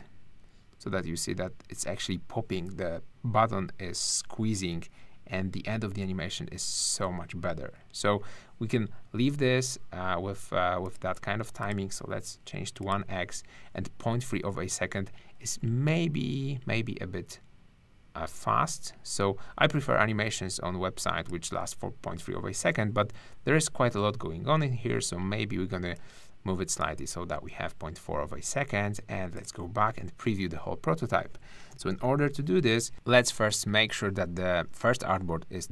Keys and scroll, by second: 31.7 super+-.